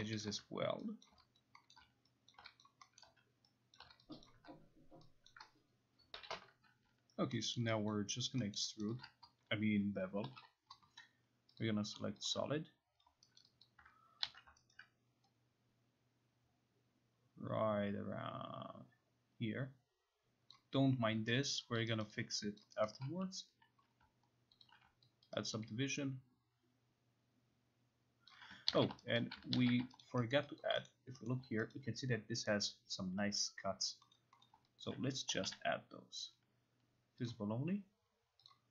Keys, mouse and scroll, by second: 0.2 alt+middle click, 1.0 shift+click, 1.3 alt+click, 1.7 alt+middle click, 2.3 shift+click, 2.6 alt+click, 3.0 alt+middle click, 3.7 shift+click, 4.2 alt+click, 5.0 alt+click, 5.3 shift+click, 6.2 Home, 7.6 alt+middle click, 7.9 alt+click, 8.3 alt+right click, 8.6 alt+middle click, 8.9 alt+right click, 10.0-10.8 typing, 11.6 click, 12.3 click, 13.4 alt+right click, 13.7 alt+click, 14.3 ctrl+z, 14.7 alt+right click, 20.5 click, 21.5 alt+right click, 22.0 alt+click, 24.7 alt+click, 25.3 alt+click, 28.3 alt+click, 28.7 ctrl+z, 29.2 alt+right click, 29.5 ctrl+z, 30.1 alt+right click, 30.3 alt+middle click, 30.6 alt+click, 30.9 middle click, 31.3 middle click, 31.7 alt+right click, 34.1 middle click, 34.5 middle click, 34.8 alt+click, 35.3 k, 35.5 k, 37.3 click, 38.5 click.